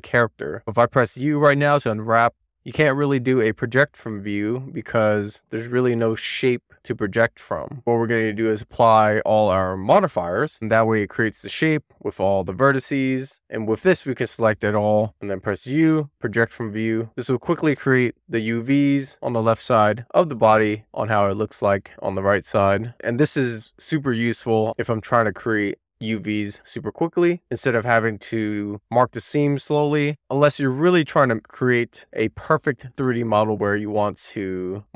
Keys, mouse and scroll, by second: 0.9 u, 3.3 click, 3.6 Tab, 4.1 click, 8.2 click, 10.1 Tab, 10.6 a, 11.4-11.8 scroll up 1, 13.4 Tab, 15.0 Tab, 16.5 u.